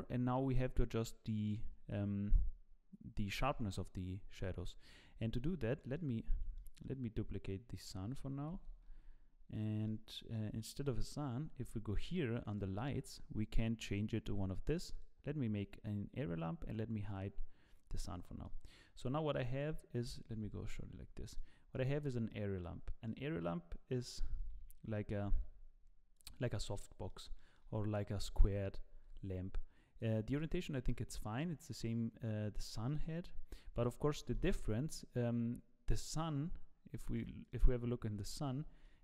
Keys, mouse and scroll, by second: 5.8 middle click, 6.5 scroll down 4, 8.5 shift+d, 9.9 middle click, 11.0 KP_0, 12.6 click, 14.9 click, 18.2 click, 18.5 middle click, 18.8 click, 19.1-19.4 scroll down 8, 19.3 middle click, 20.5 z, 20.9-22.2 scroll up 5, 21.3 middle click, 22.3 middle click, 23.0 middle click, 23.6-24.1 scroll up 1, 24.2 g, 26.4 scroll down 2, 26.6 middle click, 27.3 shift+middle click, 28.3 g, 30.3 middle click, 31.3 scroll down 1, 31.4 middle click, 34.1 middle click, 37.1 click, 37.4 click, 38.6 z.